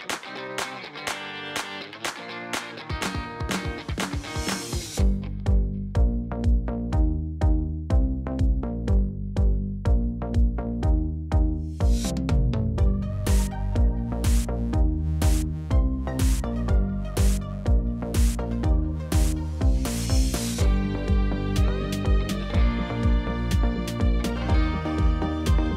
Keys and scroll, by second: 2.9 alt+a, 4.8 shift+a, 9.2 Tab, 10.5 s, 15.3 s, 15.4 x, 20.6 Tab, 21.4 g, 22.8 z.